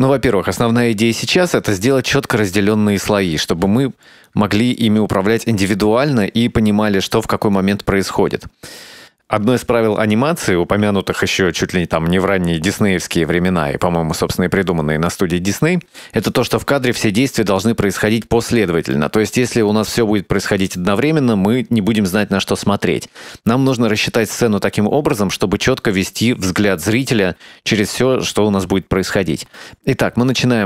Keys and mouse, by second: 4.0 shift+middle click, 4.3-4.9 middle drag, 5.7-6.4 shift+middle drag, 7.7-8.9 drag, 30.4-30.6 drag.